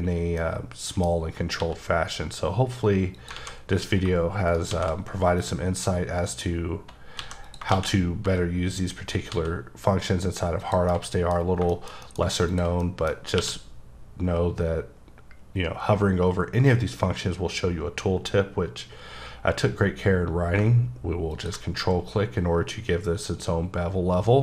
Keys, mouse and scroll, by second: 0.4 middle click, 1.6 x, 3.2 click, 3.4 alt+a, 4.5 shift+right click, 4.7 shift+a, 5.4 click, 7.2 x, 7.5 click, 7.7 shift+a, 8.4 click, 9.3 s, 10.6 click, 10.9 middle click, 11.4 scroll up 2, 11.7 middle click, 12.0 double middle click, 12.5 shift+click, 12.8 middle click, 13.4 q, 20.6 ctrl+q, 21.3 click.